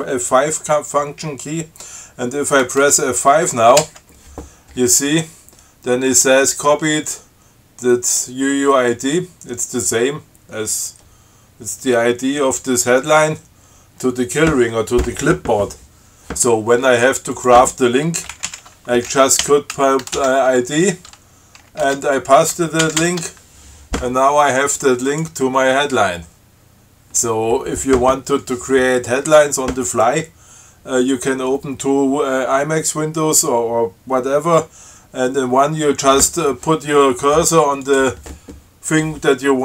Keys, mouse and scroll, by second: 4.1 F5, 17.6 click, 18.6 alt+8, 19.4-20.9 typing, 22.1 ctrl+y, 23.1 alt+9, 25.3 click, 38.1 click.